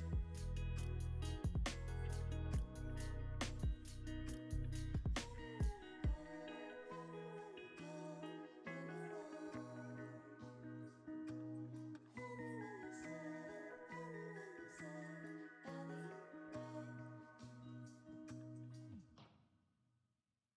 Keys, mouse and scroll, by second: 0.2 middle click, 2.0 z, 3.2 middle click, 3.7 scroll up 1, 4.4-5.8 scroll up 1, 6.1-6.5 scroll down 2, 6.5-7.7 scroll up 2, 7.8 shift+a, 10.1 g, 10.7 z, 18.2 g, 18.5 y.